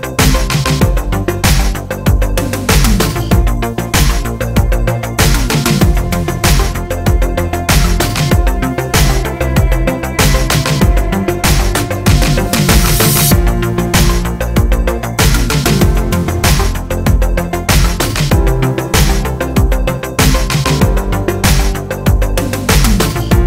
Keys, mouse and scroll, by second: 8.9-9.9 drag, 9.9-12.0 middle drag, 12.0 click, 12.4 scroll up 1, 14.0 click, 15.7-17.6 middle drag, 17.6 click, 18.5 r, 21.8 click.